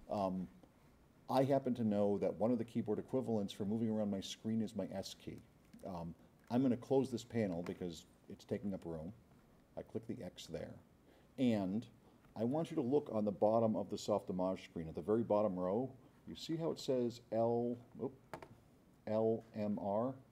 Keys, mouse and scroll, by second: 5.0-6.5 drag, 10.5 click.